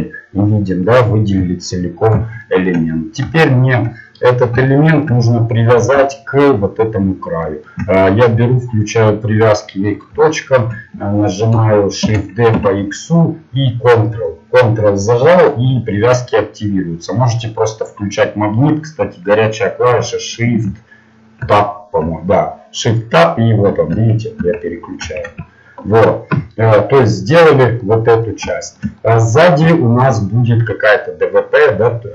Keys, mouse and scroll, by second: 1.4 KP_1, 10.3-12.0 drag, 12.0 shift+d, 26.4 shift+Tab, 26.4-27.8 middle drag.